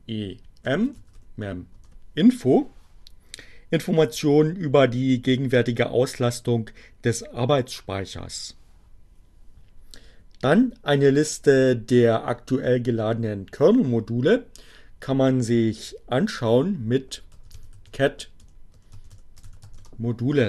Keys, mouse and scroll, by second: 0.0-0.7 typing, 1.4 Return, 15.0 c, 17.3-20.0 typing.